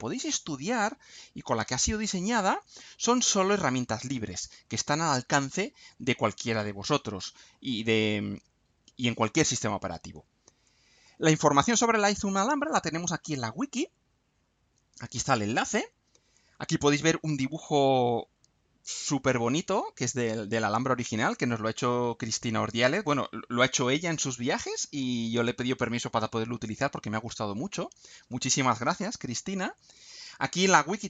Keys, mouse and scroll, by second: 15.9-16.3 scroll down 2, 29.8-30.3 scroll down 2.